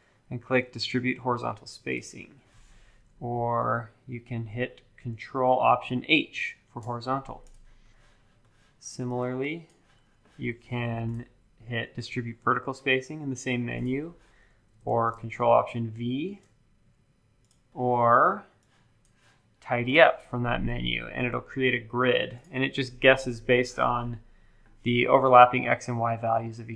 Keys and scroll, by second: 3.7 super+z, 6.3 ctrl+alt+h, 14.8 super+z, 15.9 ctrl+alt+v.